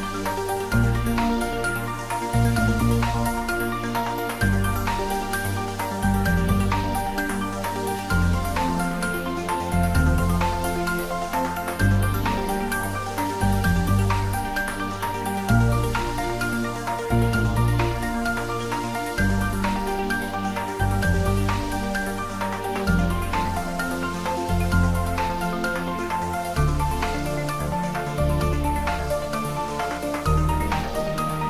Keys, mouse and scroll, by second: 0.0 ctrl+b, 2.5 click, 3.0 Tab, 3.5 scroll down 1, 4.0 middle click, 5.6 Tab, 6.1 click, 7.1 ctrl+r, 8.5 scroll up 1, 9.3 click, 10.2 s, 10.6 y, 15.0 click, 15.4 scroll down 1, 17.5-18.0 scroll up 1, 18.0 click, 19.1 3, 19.4 click, 20.1 shift+click, 21.4 click, 22.5-23.6 scroll up 1, 23.7-24.1 typing, 27.3 click, 27.6-28.5 typing, 30.7 click, 31.0 scroll down 1.